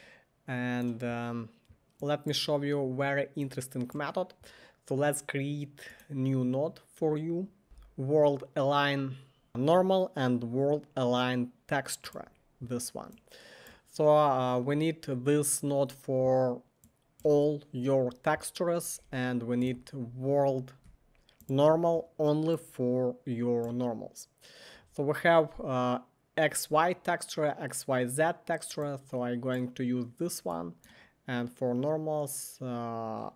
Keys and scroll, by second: 7.4-8.1 typing, 9.2-10.0 typing, 19.6 Tab, 20.8 w, 25.2 typing.